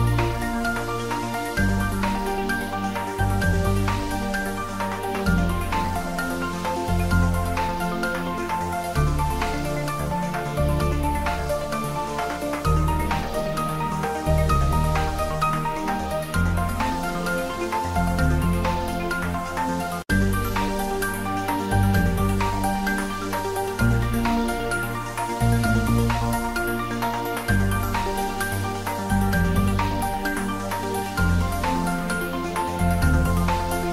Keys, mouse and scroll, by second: 1.1 click, 1.3-5.3 ctrl+middle drag, 5.3 r, 5.7 click, 6.1 g, 8.1 click, 9.2 ctrl+s, 10.0-13.0 typing, 11.2 click, 12.8 click, 14.1 r, 16.2-17.1 typing, 16.2 click, 19.3-20.0 typing, 20.5 click, 21.2 ctrl+s, 21.5 click, 22.1 ctrl+s, 23.1 shift+click, 23.8 typing, 24.7 Up, 26.4 Return, 26.6 ctrl+s, 27.0 click, 27.5 ctrl+s, 27.8-29.7 ctrl+middle drag, 29.7 ctrl+s, 30.6-31.8 middle drag, 31.8 ctrl+middle click, 32.2-33.9 middle drag.